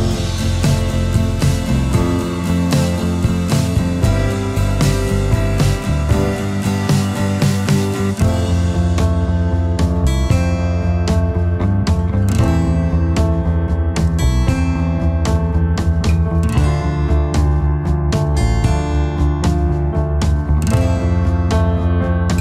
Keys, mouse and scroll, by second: 0.5 ctrl+shift+a, 1.0 alt+scroll down 1, 1.3 space, 3.3 v, 4.0-5.4 alt+scroll up 1, 12.8 ctrl+z.